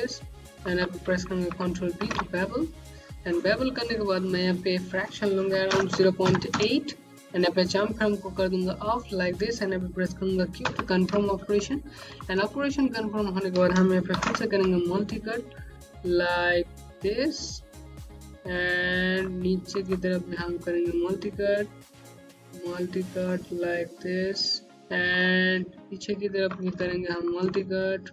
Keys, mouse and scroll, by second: 1.9 b, 4.4 click, 5.6 KP_0, 5.8 KP_Decimal, 6.1 KP_8, 6.4 KP_Enter, 8.1 click, 10.6 q, 11.4 scroll up 1, 11.9 middle click, 12.1 Home, 12.4 scroll up 1, 14.0 x, 15.0 click, 17.8 right click, 18.3 scroll down 1, 19.1 alt+middle click, 19.6 middle click, 22.1 click, 24.7 scroll down 1, 25.1 click, 26.7 middle click, 27.0 Home, 27.6-28.1 scroll up 1.